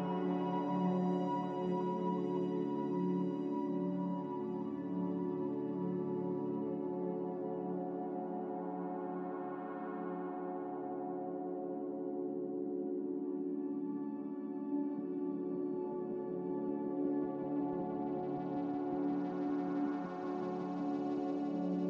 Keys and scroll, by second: 14.8 z.